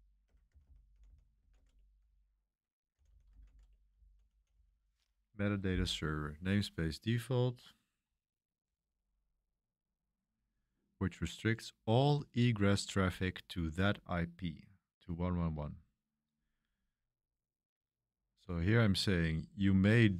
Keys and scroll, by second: 0.0-6.0 typing, 8.6 typing, 10.2 j, 15.4-16.7 typing, 18.3-20.1 typing.